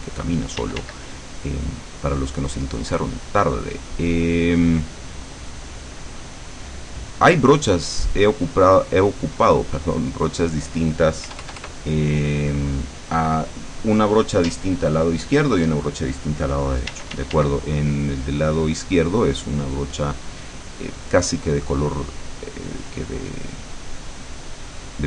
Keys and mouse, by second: 0.7 d, 1.1-10.3 drag, 11.3 KP_Add, 12.4 click, 17.0 d, 17.7-22.2 drag, 23.1-25.0 drag.